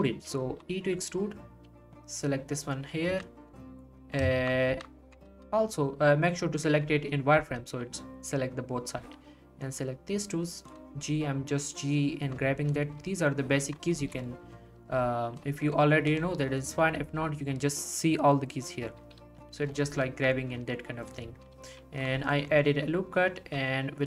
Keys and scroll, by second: 0.4 e, 1.7 g, 3.1 z, 4.7 ctrl+z, 5.3 ctrl+z, 7.3 g, 13.9 ctrl+r, 14.8 g, 17.0 g, 19.2 g, 21.5 g, 23.4 e.